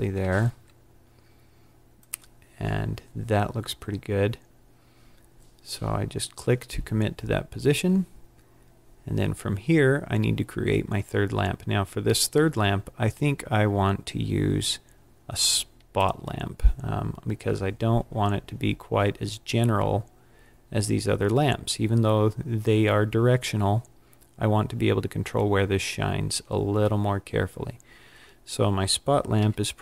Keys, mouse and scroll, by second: 15.9 click, 29.3 KP_1, 29.3 KP_1.